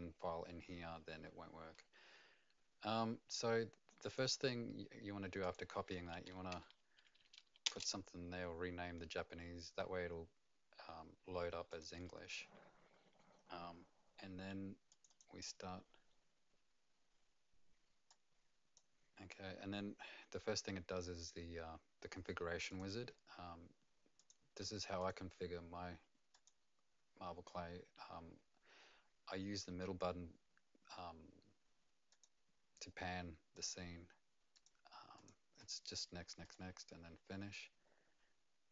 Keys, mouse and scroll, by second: 4.1 click, 4.2 click, 5.9 F2, 6.5 Home, 6.8 a, 7.0 a, 7.3 a, 7.6 Return, 11.7 click, 14.9 click, 15.1 click, 22.7 click, 24.2 click, 25.0 click, 26.3 click, 32.1 click, 33.5 click, 35.1 click, 35.6 click.